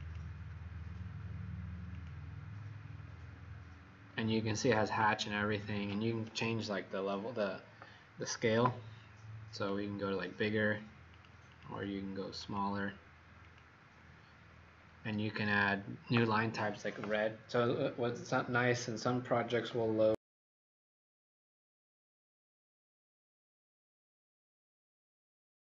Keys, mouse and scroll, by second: 2.6-3.1 scroll down 6, 4.0 scroll up 6, 6.2 click, 11.4 click, 12.3 click, 14.5-15.4 scroll down 5.